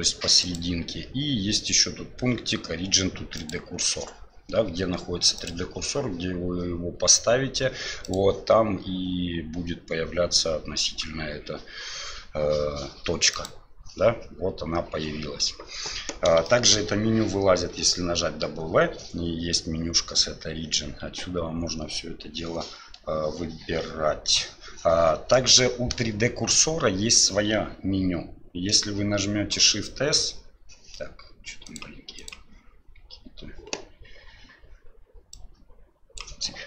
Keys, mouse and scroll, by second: 0.6-3.5 drag, 5.4 click, 8.0-13.5 drag, 16.4 shift+middle drag, 17.7 w, 29.5 shift+s, 32.2 click, 35.3 click.